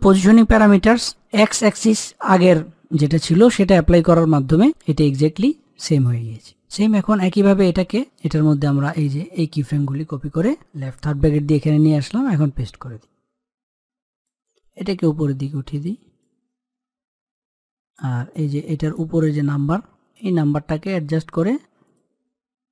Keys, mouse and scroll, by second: 4.4-6.8 drag, 8.7-10.1 drag, 10.1 ctrl+c, 10.7 click, 13.1 ctrl+v, 13.2-18.3 drag, 18.3-21.8 drag.